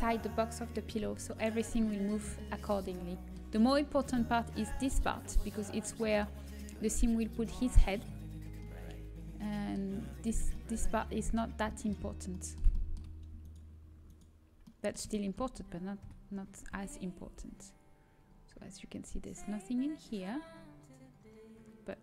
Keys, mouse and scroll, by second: 1.5-12.0 middle drag, 12.7-13.4 scroll up 1, 13.4-16.0 middle drag, 16.0 KP_7, 16.7 z, 17.2 g.